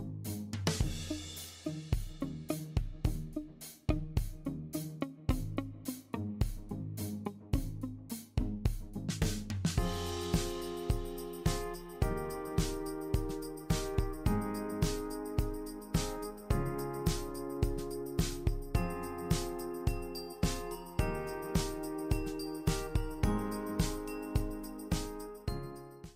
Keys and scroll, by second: 0.3-1.2 typing.